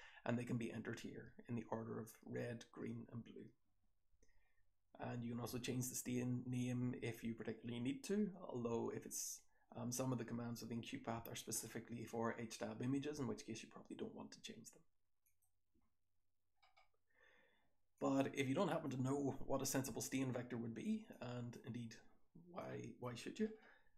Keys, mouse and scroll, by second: 16.6-17.9 scroll up 1, 17.9-18.8 drag, 17.9-18.8 scroll up 1, 18.8-19.6 scroll up 1, 19.6-20.9 scroll up 1, 20.9-22.2 scroll up 1, 21.1-21.4 drag, 22.2-23.6 scroll up 1, 22.6-22.9 drag, 23.6-23.9 scroll up 1.